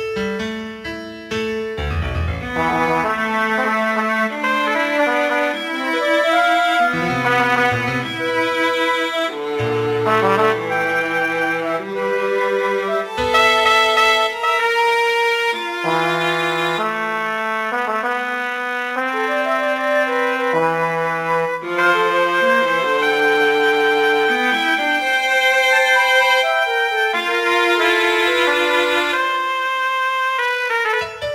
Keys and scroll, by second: 2.1 g, 6.0 -, 6.9 ctrl+v, 8.1 ctrl+h, 8.9 ctrl+c, 9.2 space, 10.1 ctrl+v, 10.3 Return, 23.5 b, 25.7 m, 29.9 m.